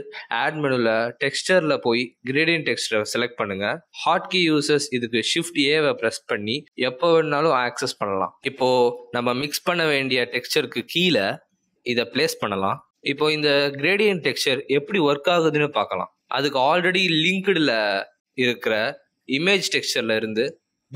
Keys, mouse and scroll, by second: 0.0 click, 5.1 shift+a, 18.3 middle click.